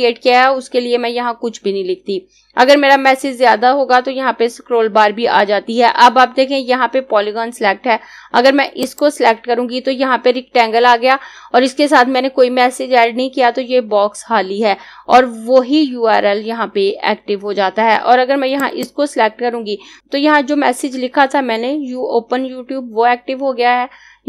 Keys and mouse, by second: 8.5 click, 18.1 click.